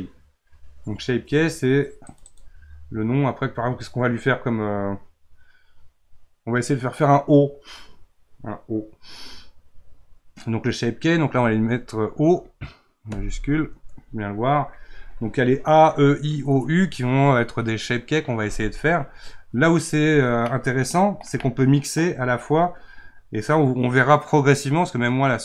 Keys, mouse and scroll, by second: 2.1-5.4 drag, 20.4-24.4 middle drag.